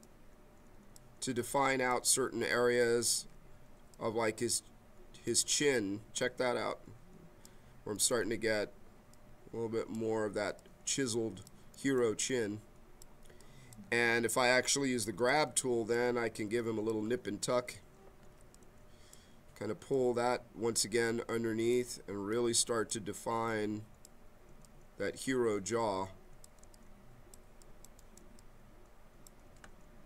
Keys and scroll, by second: 18.4 b.